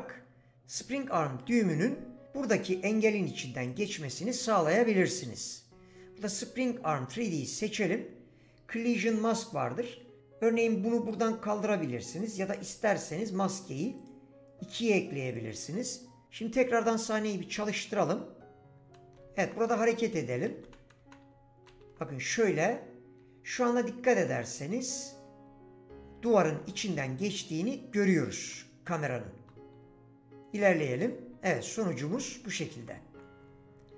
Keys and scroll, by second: 18.8 w, 19.2 d, 20.5-22.4 typing, 23.8 s, 25.5 w, 26.9 s, 28.2 a, 29.8 w, 31.0 s, 31.7 a, 32.7-33.4 typing.